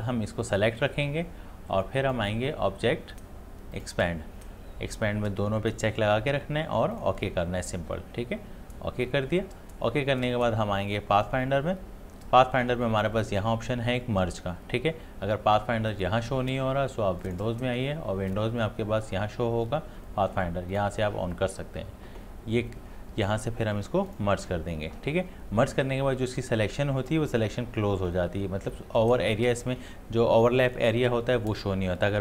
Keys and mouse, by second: 2.1 click, 6.9 click, 11.1 click, 15.9 click, 20.7 click, 24.1 click.